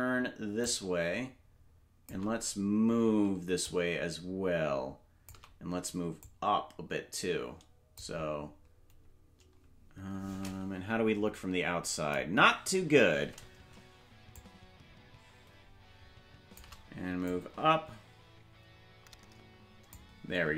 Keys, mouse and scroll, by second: 0.6-2.1 shift+drag, 3.6-5.4 drag, 6.2-8.0 drag, 12.3 KP_0, 14.3-16.6 shift+drag, 17.2-19.9 drag.